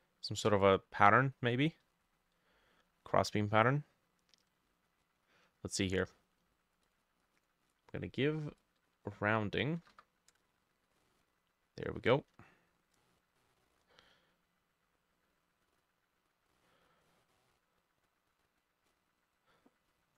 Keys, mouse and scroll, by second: 9.8 typing, 10.3 Return, 11.9 ctrl+middle click, 12.0 ctrl+z.